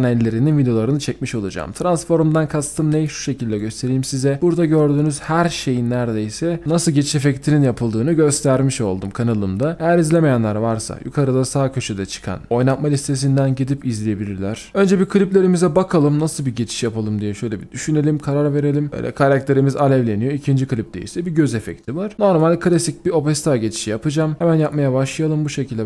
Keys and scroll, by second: 3.1-3.9 typing, 6.8-7.6 typing.